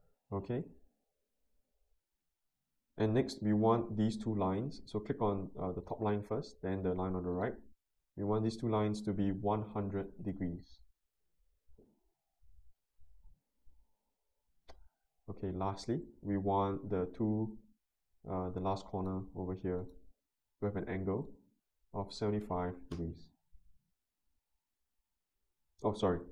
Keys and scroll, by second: 9.3-10.2 typing, 10.3 Return, 21.9-22.9 typing, 22.9 Return.